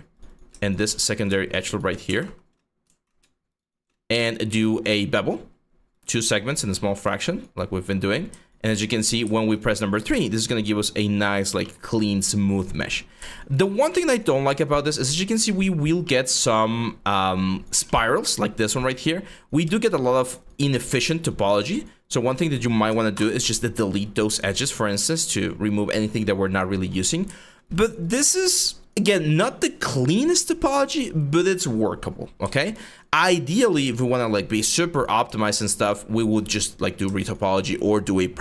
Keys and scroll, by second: 1.8 ctrl+z, 2.5 ctrl+z, 7.4 3, 12.6 1, 22.8 ctrl+BackSpace, 28.8 alt+3, 32.9 1, 34.1-34.8 typing.